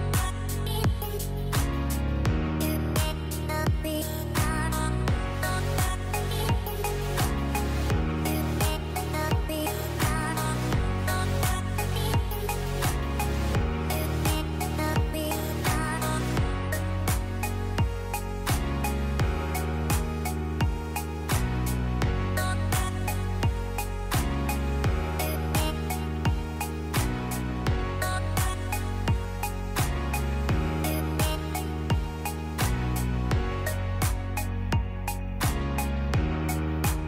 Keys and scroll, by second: 1.9 u, 8.9 r, 11.0 |, 28.1 space, 30.6 space, 35.9 F9.